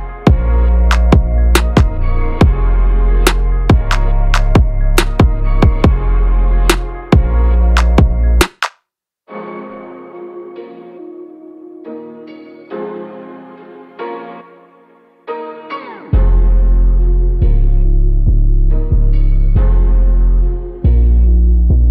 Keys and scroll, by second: 1.3 ctrl+v, 20.7 ctrl+a.